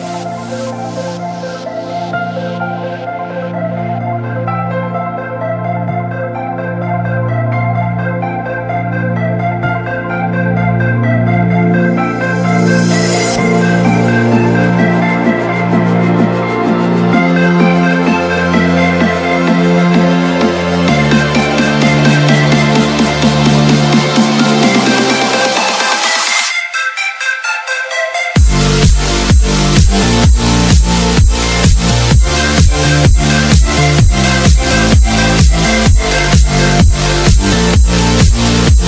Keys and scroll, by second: 1.3 space, 2.1 shift+Page_Down, 3.0 alt+c, 4.9 Escape, 6.1 b, 6.3 v, 7.8 r, 8.4 Escape, 12.3 l, 13.4 Escape, 16.0 space, 19.0 alt+c, 20.4 F4, 22.0 Escape, 26.3 shift+F2, 27.7 F3, 38.5 Escape.